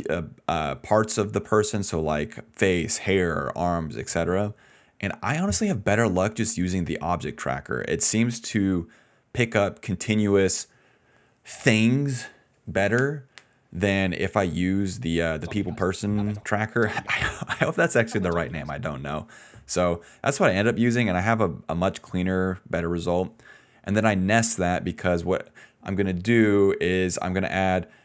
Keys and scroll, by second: 9.2 ctrl+shift+z, 15.3 space, 16.3-18.7 typing.